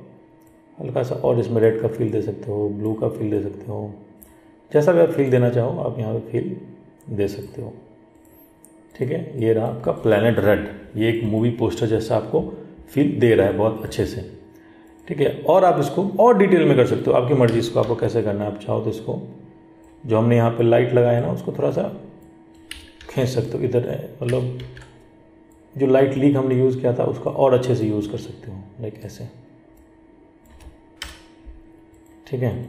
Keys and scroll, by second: 18.0 ctrl+t, 23.2 ctrl+t.